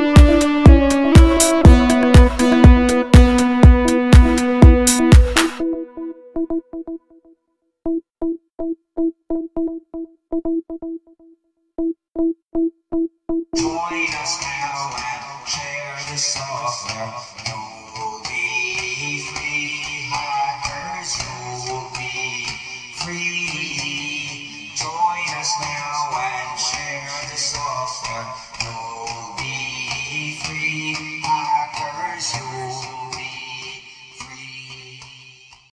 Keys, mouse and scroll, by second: 0.4-0.9 scroll up 2, 1.2-1.8 scroll down 2, 2.2-2.7 ctrl+scroll down 3, 5.7 click, 7.5 click, 10.3 click, 11.5 click, 12.4 click, 14.1 click, 15.6 click, 17.6 click, 18.3 click, 20.9 click, 21.4 click, 25.9 scroll up 1, 26.8 click, 29.0-29.7 scroll down 1, 30.8-34.2 drag.